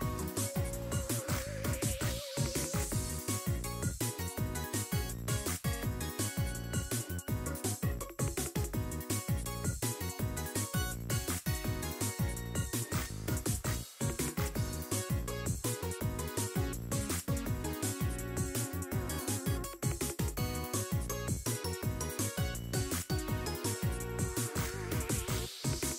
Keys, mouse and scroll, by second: 1.5 click, 2.1 click, 2.8-6.0 drag, 6.4 middle click, 7.2 click, 8.9-12.8 drag, 13.2-13.6 scroll down 1, 13.6 click, 14.0-15.8 drag, 16.1 click, 17.5 click, 18.0-18.8 scroll up 6, 18.2 click, 18.2 middle click, 18.8 click, 18.8 middle click, 19.4 click, 21.4-22.5 scroll down 7, 22.5 click, 24.5 scroll up 3.